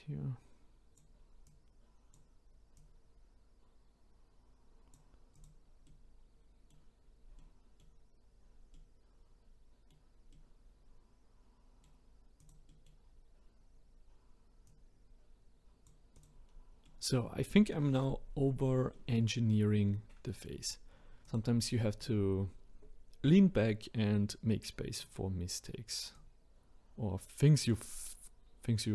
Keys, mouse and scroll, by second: 1.5-2.9 drag, 5.3 click, 5.8-7.0 middle drag, 7.0-7.4 scroll down 2, 7.4 middle click, 8.3-8.7 scroll down 1, 8.7-12.4 middle drag, 12.4 click, 12.7 middle click, 13.1-13.9 scroll up 2, 13.9-14.6 scroll up 3, 14.6 click, 16.1 click, 16.5-16.8 scroll down 4, 16.8-18.1 middle drag, 18.1-18.9 scroll down 1, 18.9 middle click, 19.4-19.9 scroll up 1, 19.9-20.3 scroll down 3, 20.3 middle click, 21.2 click, 22.4 scroll up 1, 25.0 click, 26.1 click.